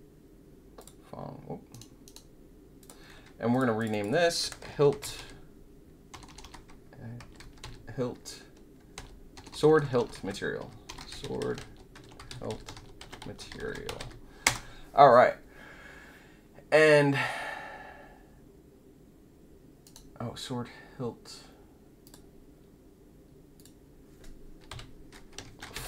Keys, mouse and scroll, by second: 0.7 click, 1.7 right click, 2.7 click, 3.5 click, 3.7 click, 3.9 click, 4.6-5.6 typing, 6.9-14.3 typing, 19.8 right click, 22.0 click, 23.5 click, 25.4 shift+p.